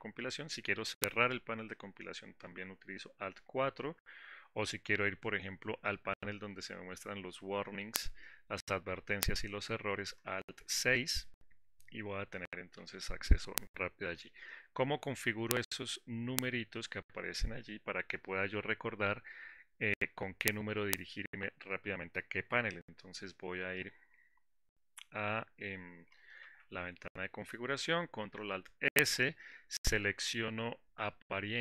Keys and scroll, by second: 2.9 alt+4, 11.2 alt+6, 27.3 ctrl+alt+s.